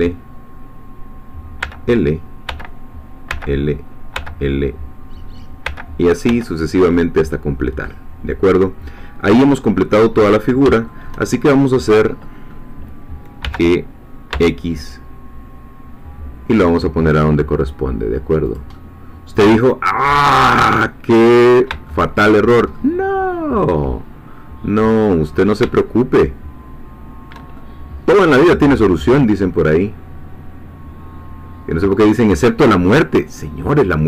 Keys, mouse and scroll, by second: 1.6 l, 3.3 l, 5.7 l, 7.5-7.8 scroll down 2, 7.8-9.5 middle drag, 9.6-9.9 scroll up 2, 9.9 middle click, 10.9-11.9 shift+middle drag, 12.2 middle click, 13.4 g, 14.3 x, 18.5 click, 18.7-21.3 middle drag, 21.3-21.6 scroll up 2, 21.9-25.1 shift+middle drag, 25.1-25.5 scroll up 2, 25.7-34.0 shift+middle drag.